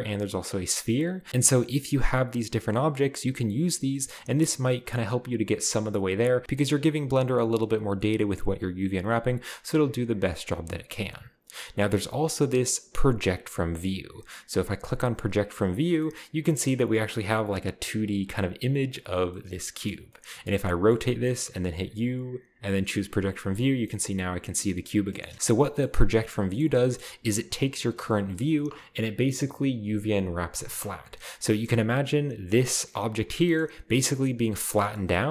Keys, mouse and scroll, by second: 0.4 click, 0.9 u, 9.2 click, 9.9 u, 14.8 click, 15.9 middle click, 16.1-19.3 scroll up 2, 16.6-17.0 middle drag, 20.0 middle click, 20.0-21.0 scroll down 2, 21.2 middle click, 21.7 u, 22.9 click, 23.8 middle click, 25.1 middle click, 25.3-26.6 middle drag, 26.6 scroll down 1, 31.1-32.0 scroll up 1, 32.0-33.2 scroll up 1, 33.2-34.3 scroll down 1, 33.3-35.3 middle drag, 34.6-35.3 scroll down 1.